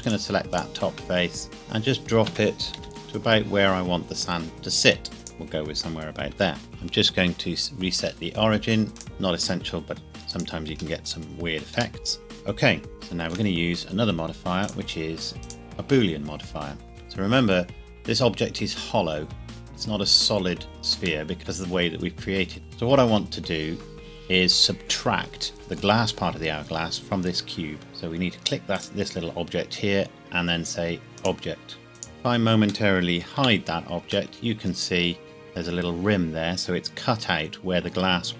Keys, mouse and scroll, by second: 1.2 scroll down 1, 1.5 g, 2.2 Escape, 2.8 o, 2.8 z, 5.2 click, 6.3 Tab, 6.6 click, 8.9 click, 10.0 g, 10.3 click, 12.0 middle click, 12.9 shift+middle click, 14.6 click, 21.2 middle click, 21.4 middle click, 25.6 middle click, 28.7 click, 31.2 click, 32.4 click, 32.9 middle click, 33.3 h, 34.3 middle click, 34.9 scroll up 1, 37.2-37.6 scroll down 1.